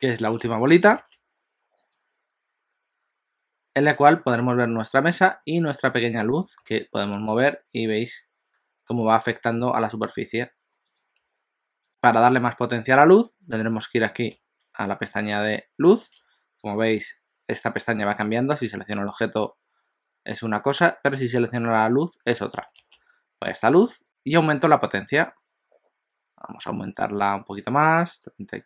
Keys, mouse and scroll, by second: 2.6 click, 4.9 middle click, 6.0 click, 6.4 click, 6.6 g, 11.2 s, 18.6 click, 21.3 click, 23.6 click, 25.3 click, 28.4 click.